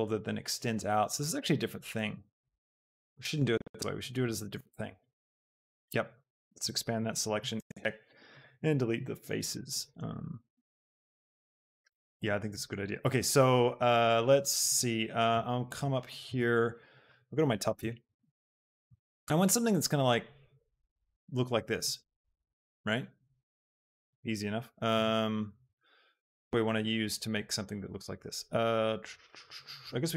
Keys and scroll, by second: 6.6 ctrl+KP_Add, 7.7 ctrl+x, 10.6 Tab, 24.9 KP_7, 25.7 shift+a.